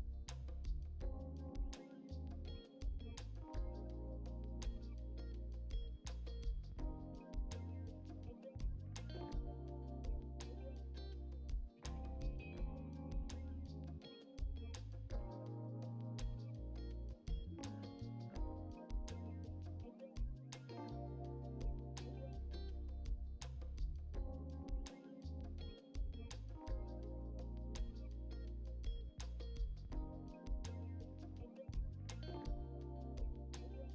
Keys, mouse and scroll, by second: 0.6-1.2 scroll down 1, 1.8 click, 2.8 shift+middle click, 2.9 click, 3.1 KP_1, 3.9 scroll down 1, 4.1 shift+middle click, 4.3 click, 4.8 click, 5.9 alt+z, 6.7 click, 7.6 Delete, 7.9 click, 8.6 middle click, 8.8 KP_7, 9.3 r, 10.5 click, 11.4 ctrl+z, 11.6 r, 13.1 click, 14.2 shift+middle click, 15.0 click, 15.3 shift+middle click, 15.8 KP_1, 16.1 click, 17.1 scroll up 4, 17.1 middle click, 17.4 click, 17.8 middle click, 18.2 alt+click, 18.9 click, 19.1 scroll down 1, 19.2 middle click, 19.9 click, 20.4 middle click, 20.7 KP_1, 20.9 alt+z, 21.0 middle click, 21.3 scroll down 4, 21.4-22.5 shift+middle drag, 22.9-23.3 ctrl+z, 23.8 ctrl+z, 23.8 KP_1, 24.3 alt+z, 24.5 scroll up 1, 24.6 shift+middle click, 25.1 click, 26.3 Delete, 27.1 click, 27.4-27.9 scroll down 1, 27.9 KP_7, 28.2 r, 29.0 click, 29.8 scroll down 2, 29.9 middle click, 30.3 click, 30.5 alt+z, 30.6 shift+middle click, 30.8 scroll up 1, 31.0 alt+click, 31.1 alt+click, 31.4 click, 32.0 alt+shift+click, 32.7 shift+middle click, 33.5 click, 33.7 middle click.